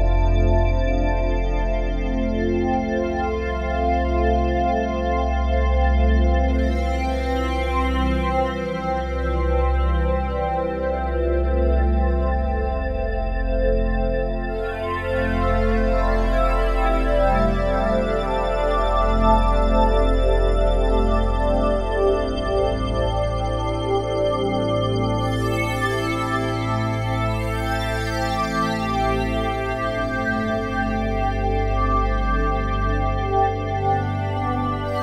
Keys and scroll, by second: 13.6 F4, 27.9 ctrl+z.